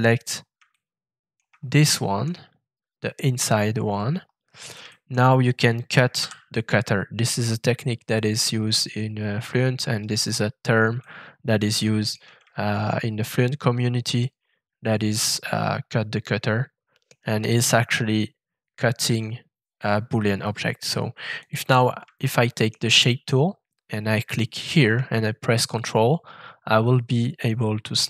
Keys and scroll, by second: 6.2 shift+f.